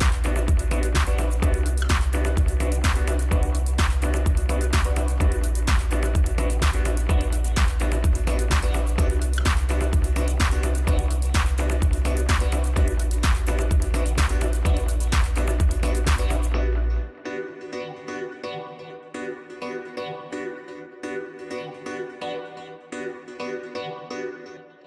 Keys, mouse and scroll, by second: 0.6 e, 1.5 s, 5.9-6.5 scroll down 1, 6.9 click, 7.6 ctrl+z, 7.9 ctrl+z, 8.8 ctrl+z, 11.2 Tab, 12.1 s, 14.8-15.8 drag, 15.8 scroll down 1, 17.0 shift+d, 19.2-19.9 scroll down 1, 20.0 KP_Divide, 20.9-21.4 middle drag, 21.4 scroll up 2, 22.2 click, 23.4 click, 24.4 click.